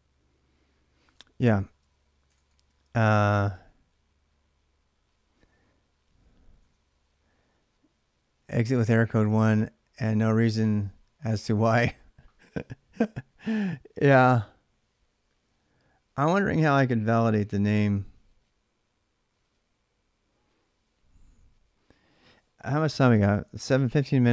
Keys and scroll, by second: 1.9-3.3 typing, 24.0 ctrl+[, 24.0 ctrl+j, 24.1-24.3 typing.